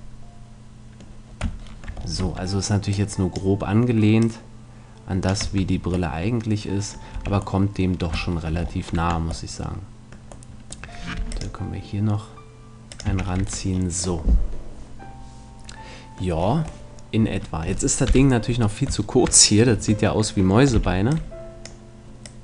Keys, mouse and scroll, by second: 0.2-2.2 middle drag, 2.2 Tab, 2.9-6.1 drag, 5.4 Tab, 7.1 a, 7.7 middle click, 8.5 middle click, 8.9 Tab, 10.0 middle click, 11.1 ctrl+r, 13.1-14.9 drag, 13.1 a, 13.4 Tab, 18.1 KP_7, 19.1 middle click, 19.7 Tab, 20.7 b, 22.3-22.4 drag.